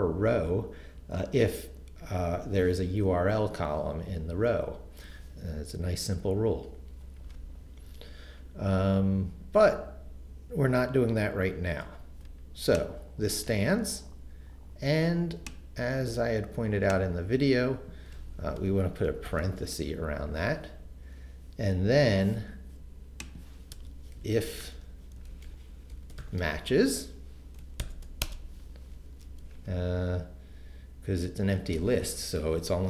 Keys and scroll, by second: 19.3 shift+9, 23.7 Return, 24.2-27.8 typing, 28.2 shift+Return, 29.1 Return.